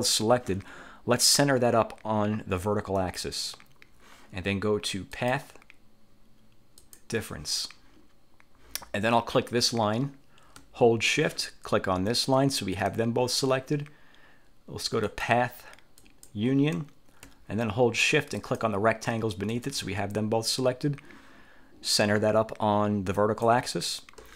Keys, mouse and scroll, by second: 3.2 click, 5.3 click, 7.0 click, 9.4 click, 12.2 shift+click, 15.2 click, 16.1 click, 18.5 shift+click, 23.3 click.